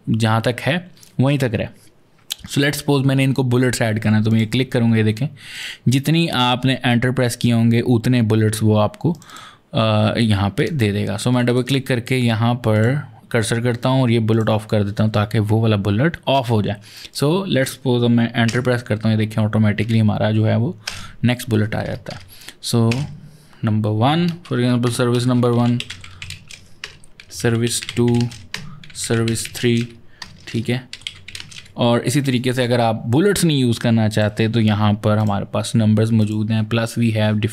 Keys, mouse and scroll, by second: 4.1 click, 5.4 click, 9.0 click, 9.1 double click, 10.4 click, 11.2 click, 11.3 double click, 11.5 click, 12.6 click, 14.2 click, 16.9 click, 18.3 Return, 19.7 Return, 20.7 Return, 22.8 Return, 24.3-29.7 typing, 26.7 Return, 28.4 Return, 30.8-31.4 typing, 33.1 click, 35.0 click, 36.0 click.